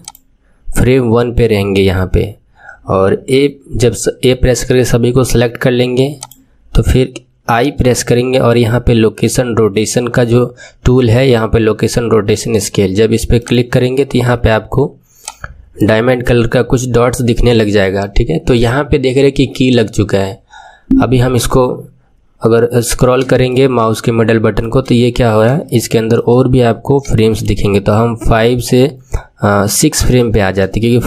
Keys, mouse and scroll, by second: 7.6 i, 20.8-21.9 scroll up 9, 23.4-25.0 drag, 23.4-25.0 shift+middle drag, 25.0-25.6 scroll up 4, 25.6 shift+middle click, 26.3-26.9 scroll up 5, 27.1 shift+middle click, 29.6-30.1 scroll up 3, 30.1 shift+middle click, 30.8-31.0 scroll up 4.